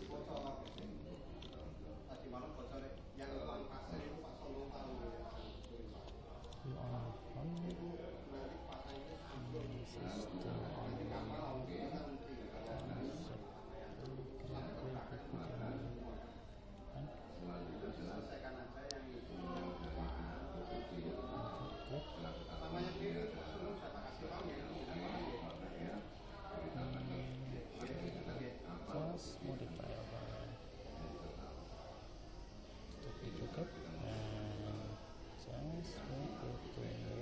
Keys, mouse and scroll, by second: 7.9 click, 8.9 middle click, 9.9-12.7 middle drag, 12.8 click, 12.8 right click, 19.9-24.5 middle drag, 24.7-29.0 middle drag, 32.8 alt+d.